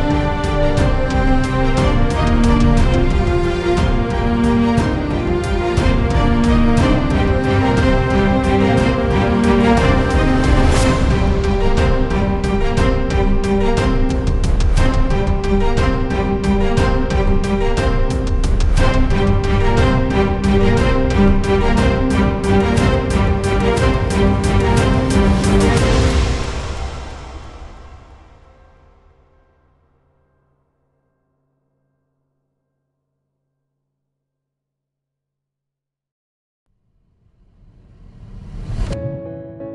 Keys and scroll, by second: 11.5-12.2 w, 12.5-13.2 w, 20.4-22.5 typing, 23.3 Return, 35.4 Delete, 36.4-38.6 typing.